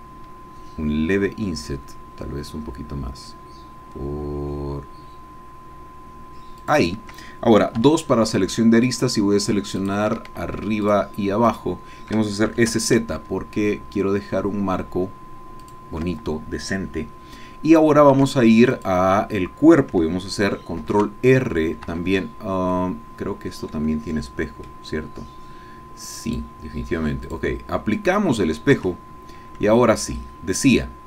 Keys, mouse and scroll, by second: 6.8 shift+click, 7.8 2, 8.9 click, 9.8 shift+click, 10.8 shift+click, 11.6 shift+click, 12.5 s, 12.7 shift+z, 15.6 shift+click, 18.2 Tab, 18.8 click, 20.8 ctrl+r, 21.8 Escape, 22.5 scroll down 2, 22.7-24.9 drag, 26.3 click, 27.3 click, 28.0 click, 28.9 Tab, 29.3 scroll up 1, 29.8 shift+click.